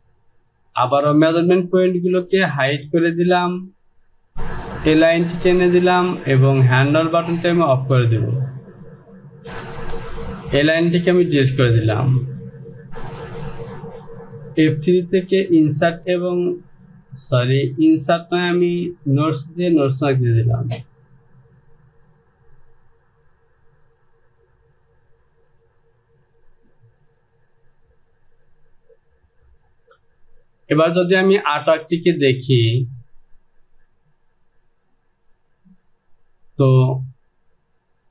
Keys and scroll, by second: 9.4 ctrl+z, 9.5 Delete, 9.5 Insert.